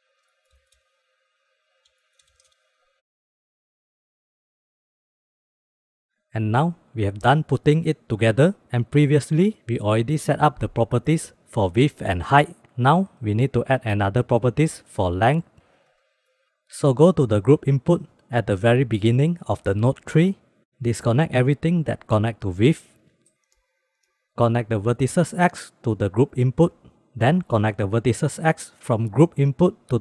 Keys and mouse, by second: 0.2 click, 0.3 click, 0.7 middle click, 1.0 shift+middle click, 1.5 click, 2.4 shift+click, 2.8 shift+b, 4.2 click, 5.4 middle drag, 5.8 middle click, 6.0 shift+middle drag, 6.5 shift+b, 7.2 middle click, 16.3 click, 16.6 click, 18.4 click, 18.9 click, 19.7 drag, 21.5 click, 21.5 middle click, 21.6 click, 22.2 ctrl+click, 22.9 ctrl+click, 23.9 ctrl+click, 24.3-27.0 drag, 28.4-29.4 drag.